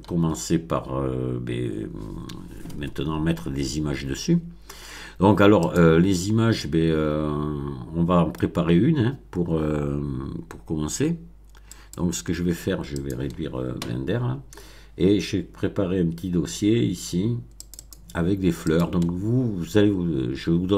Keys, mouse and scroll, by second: 5.6 click, 6.5-8.5 middle drag, 8.7 scroll down 2, 11.7 click, 12.9 click, 17.6 click, 18.7 click.